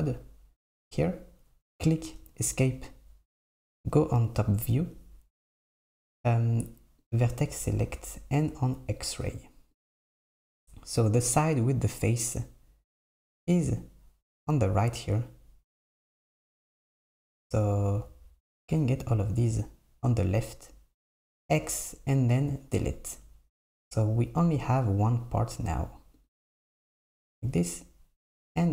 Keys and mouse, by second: 4.3 KP_7, 7.1-9.9 drag, 16.9 KP_7, 18.7 click, 21.2 x, 23.2 Tab, 26.2-28.7 drag.